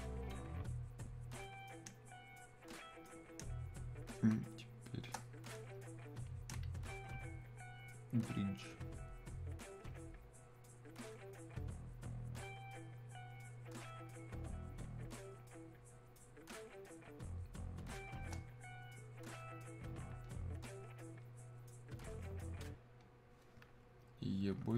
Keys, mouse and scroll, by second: 4.3 space, 16.9 click, 17.0 space, 20.0 click, 22.3-24.7 drag.